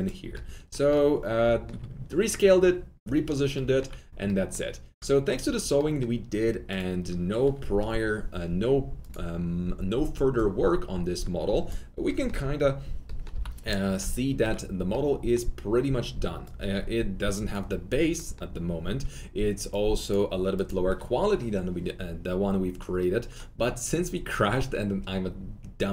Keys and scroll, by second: 13.3 f.